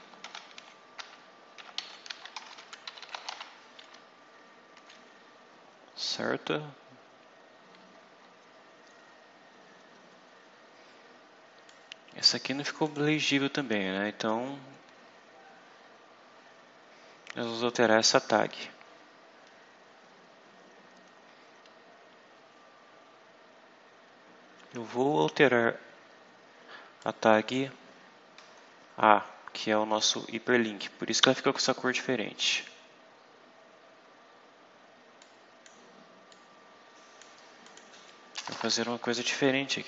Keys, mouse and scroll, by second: 0.0-3.7 typing, 5.7-7.1 scroll down 6, 7.5-8.3 scroll up 2, 11.6 click, 12.7 click, 13.9 scroll up 2, 15.0 scroll up 2, 15.6-16.4 scroll down 4, 17.6-18.3 scroll up 4, 18.7-19.4 scroll up 4, 22.0 scroll down 2, 22.8 scroll up 2, 26.9 click, 27.8 scroll up 2, 28.5-29.2 scroll down 4, 35.1 click, 36.2-37.3 drag, 37.5 click, 38.2 Return, 38.6 Up, 39.4-39.8 typing.